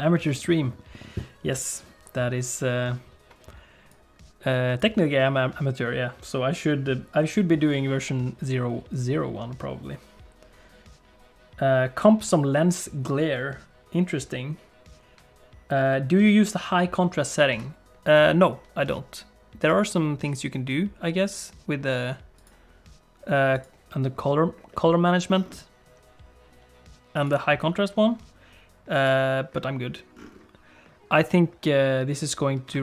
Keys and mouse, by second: 22.4 click, 23.6 click, 27.6-28.7 drag.